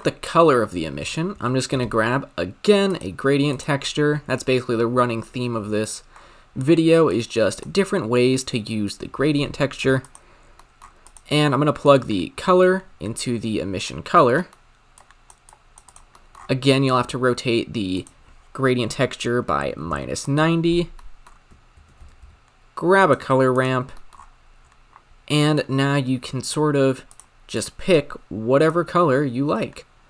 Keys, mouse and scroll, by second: 3.0 shift+a, 4.5-5.5 middle drag, 5.5 ctrl+t, 7.1-7.6 drag, 11.0-12.1 drag, 14.2 scroll down 7, 14.4-14.9 middle drag, 14.9 click, 15.5 click, 20.2 click, 20.8 scroll down 4, 21.1 middle click, 21.3-21.8 scroll up 2, 21.8 shift+a, 24.0 middle click, 24.2-25.6 scroll up 12, 25.6-27.2 drag.